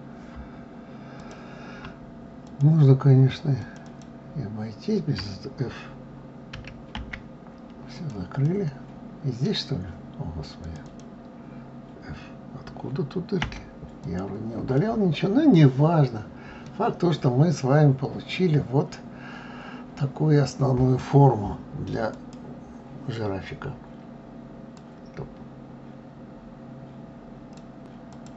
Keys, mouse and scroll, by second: 1.2 click, 2.4 shift+click, 3.6 shift+click, 3.8 shift+click, 6.5 d, 6.9 f, 7.9 click, 8.4-10.6 middle drag, 10.6 click, 10.8 click, 13.4 f, 14.0 click, 14.8 middle click, 15.7-16.6 scroll down 3, 16.6-19.7 middle drag.